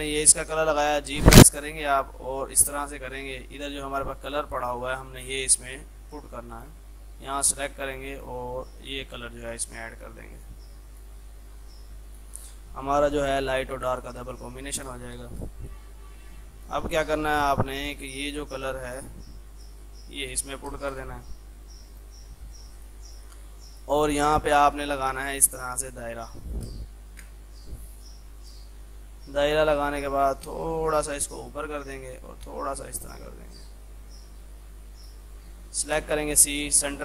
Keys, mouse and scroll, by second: 1.1 g, 1.8-3.0 drag, 3.0 F3, 4.3-6.6 drag, 6.6 click, 11.3 F3, 11.7-14.5 drag, 14.5 click, 15.3 space, 15.4 click, 16.0 F3, 16.4-18.9 drag, 20.8 space, 21.0 click, 22.0 right click, 22.4 F2, 22.6-26.7 drag, 26.7 space, 27.1 shift+click, 27.4 c, 28.5-36.1 drag, 36.2 c.